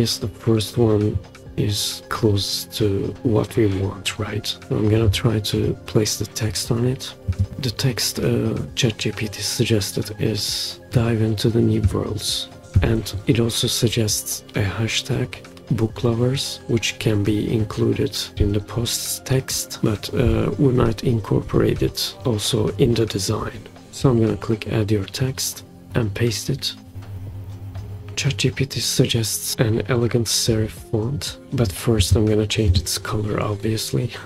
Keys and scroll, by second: 12.6 super+c, 26.9 super+v.